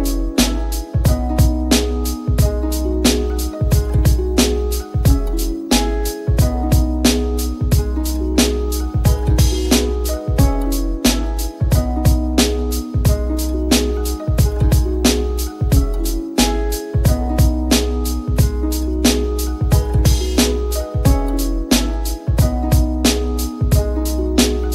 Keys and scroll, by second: 19.5 [, 21.2 [.